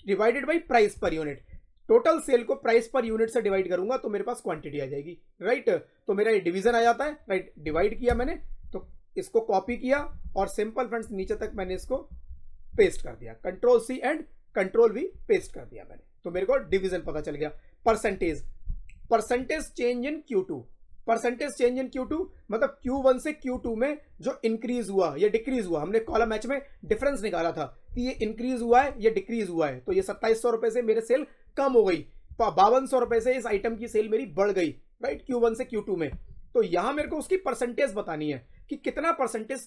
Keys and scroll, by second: 8.0 Return, 8.5 Up, 9.8 ctrl+c, 10.3 shift+Down, 12.6 ctrl+v, 16.6 Up, 16.9 Right, 17.8 Down.